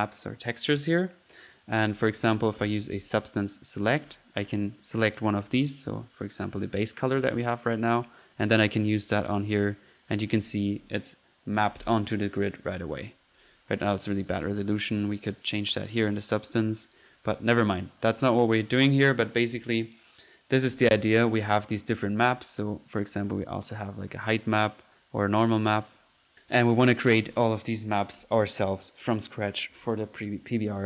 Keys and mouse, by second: 0.8 middle click, 1.9 click, 2.3 typing, 3.8-4.7 drag, 4.9 middle click, 7.3-7.9 drag, 7.9-9.8 drag, 10.5 click, 13.4 click, 14.2 drag, 15.7 drag, 18.1-18.4 drag, 19.0-19.4 drag, 22.9 drag, 23.3-23.9 drag, 24.1-24.6 drag, 24.9-25.2 drag, 25.7 click, 26.3-27.4 drag.